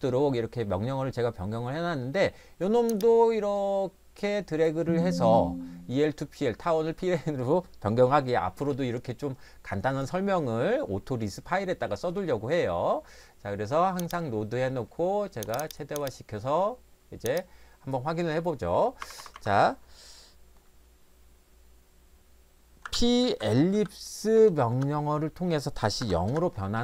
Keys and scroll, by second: 19.0 Escape, 19.2 Escape, 19.3 Escape, 22.6-24.2 typing, 24.7 Return, 26.1 0, 26.3 Return.